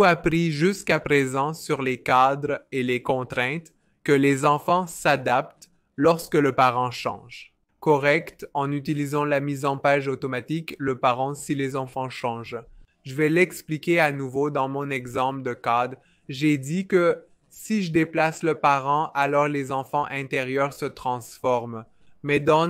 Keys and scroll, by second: 15.1 typing, 18.6 v.